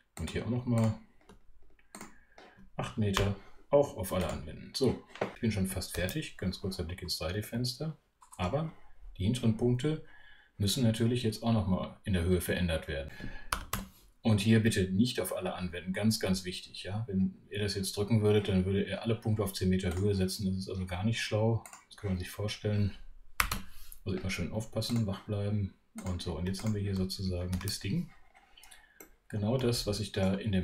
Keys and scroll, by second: 13.3-14.2 typing, 23.2-24.0 typing, 27.5 shift+super+3.